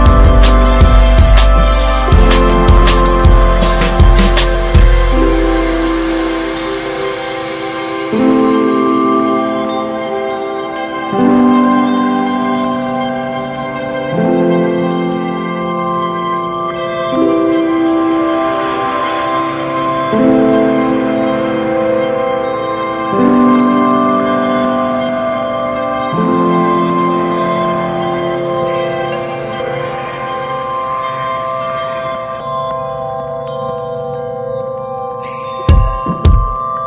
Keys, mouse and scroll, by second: 0.7-2.4 middle drag, 2.4 click, 3.7 ctrl+b, 4.8 Tab, 4.8 click, 5.0 scroll down 6, 5.2-7.0 middle drag, 7.0 drag, 7.2 scroll down 2, 7.4-7.9 middle drag, 7.9 ctrl+s, 8.0 ctrl+click, 8.3-9.0 middle drag, 9.0 scroll down 2, 9.2 middle click, 9.5 scroll up 1, 9.8-13.4 middle drag, 13.4 scroll up 3, 13.7-15.9 middle drag, 15.9-17.7 drag, 17.7-18.8 middle drag, 18.8-19.1 scroll down 4, 19.1-20.0 middle drag, 20.0-20.9 drag, 20.9-25.4 middle drag, 25.4 click, 25.8 middle click, 26.1 ctrl+s, 31.5 KP_0, 32.4 scroll down 1, 32.8-33.7 scroll up 1, 33.7 n, 35.5 drag, 35.8 n, 36.0-36.4 scroll down 11.